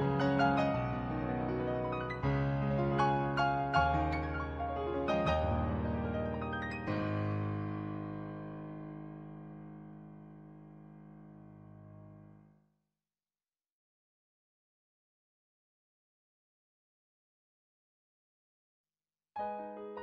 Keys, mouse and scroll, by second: 0.7 ctrl+z, 1.9 ctrl+z, 4.1 ctrl+z, 5.3 ctrl+z, 7.6 ctrl+z, 8.6 ctrl+z, 10.1 ctrl+z, 11.8 ctrl+z, 13.9 ctrl+z, 14.9 ctrl+z, 16.6 ctrl+z, 19.1 ctrl+z, 19.9 ctrl+z.